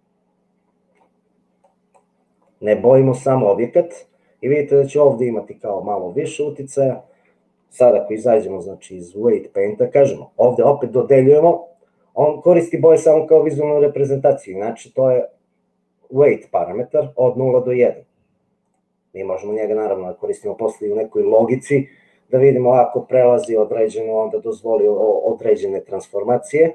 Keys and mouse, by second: 0.3 middle click, 1.7 click, 2.5 middle click, 9.6-12.1 drag, 18.7-19.8 drag, 21.6 middle click.